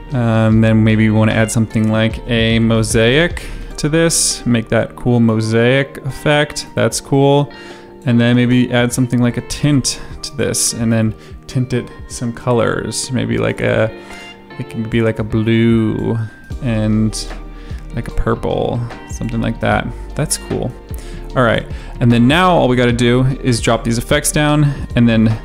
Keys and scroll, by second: 1.2 ctrl+space, 2.4 m, 2.7 s, 8.7-9.8 typing.